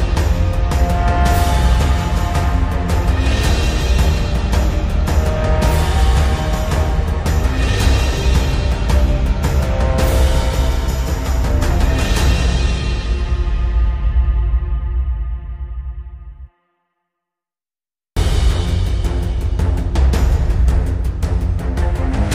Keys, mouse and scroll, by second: 2.2 scroll down 1, 3.4 click, 6.4 click, 7.5 click, 14.1-15.1 scroll up 1, 15.1 click, 16.4-16.8 scroll up 1, 17.7-20.8 scroll down 1, 21.0 click, 21.9 click.